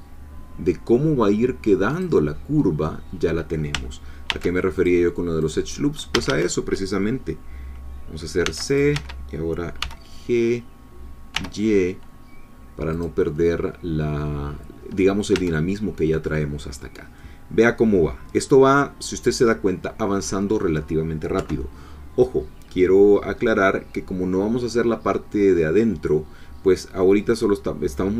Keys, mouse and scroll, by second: 1.9 click, 4.3 ctrl+r, 4.7 ctrl+click, 5.4 click, 6.1 a, 8.5 c, 8.7 click, 8.9 Escape, 9.8 g, 11.3 y, 12.9-14.5 drag, 15.0-15.3 scroll down 1, 15.3 Tab, 15.7-17.2 scroll down 2, 17.2-21.3 drag, 21.3 3, 22.6-23.1 scroll down 1, 23.1-24.9 scroll up 1, 24.9-27.0 scroll up 1, 27.0-28.1 drag.